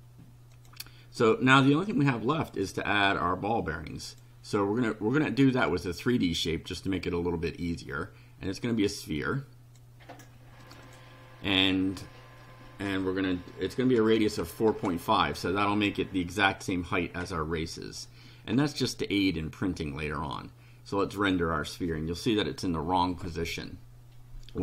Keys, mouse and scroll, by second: 0.5 click, 1.6 click, 4.1 click, 5.7 click, 8.5-10.0 drag, 10.6 click, 13.7-14.9 typing, 21.2 click.